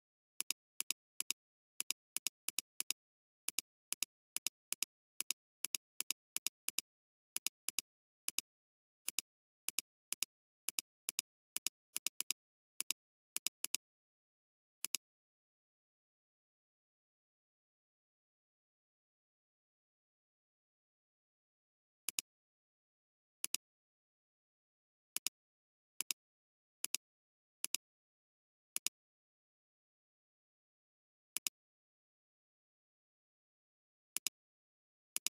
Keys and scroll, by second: 22.0 alt+space, 22.6 alt+space, 23.4 alt+space, 24.1 alt+space, 31.3 space, 33.5 [, 33.9 [, 34.0 [.